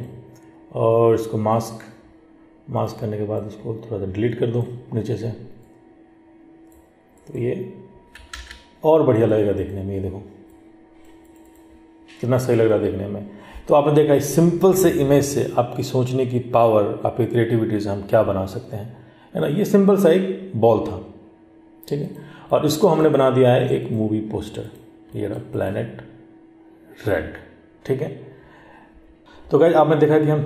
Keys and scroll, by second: 8.5 ctrl+z.